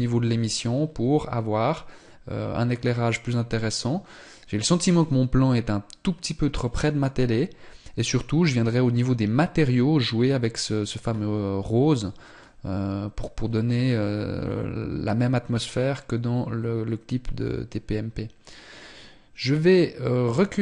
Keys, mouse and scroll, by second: 11.0 scroll up 1.